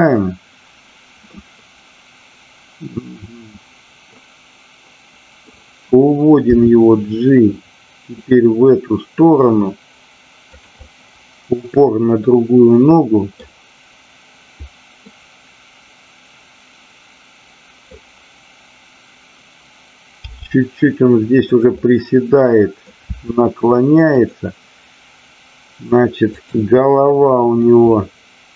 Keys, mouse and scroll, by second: 1.3-5.4 middle drag, 10.5 click, 10.8-13.4 middle drag, 15.0-17.8 middle drag, 21.5 click, 21.7-22.9 middle drag, 24.2 click, 24.2 r, 27.6-28.5 middle drag.